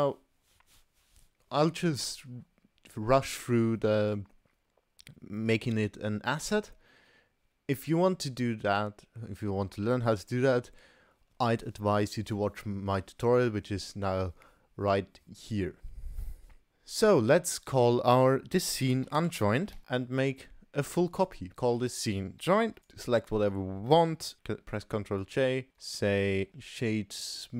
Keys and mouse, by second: 17.7-19.8 drag, 20.3-21.4 drag, 21.7-22.9 drag, 22.8 shift+a, 24.3 ctrl+j, 25.2-25.9 right drag, 26.3 shift+q.